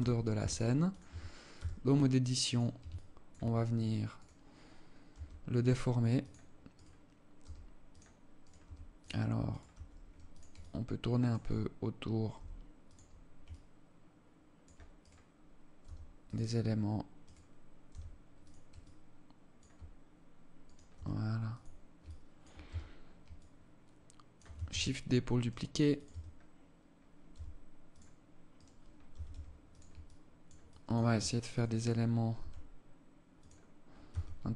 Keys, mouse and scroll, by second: 0.7 Tab, 1.2 s, 2.5 alt+shift+click, 3.1 scroll up 5, 3.7 right click, 4.7 g, 6.4 right click, 6.9 g, 7.9 right click, 8.1 g, 9.1 right click, 9.3 g, 10.1 alt+click, 11.9 g, 13.0 alt+click, 14.5 right click, 15.3 g, 16.7 right click, 17.5 g, 18.3 alt+click, 20.2 right click, 20.5 g, 21.6 alt+click, 22.2 Tab, 22.9 alt+click, 24.2 shift+d, 25.6 Tab, 26.9 g, 28.1 right click, 28.8 g, 29.6 alt+click, 30.2 alt+click, 31.1 right click, 31.9 g, 33.7 Tab, 34.1 alt+click.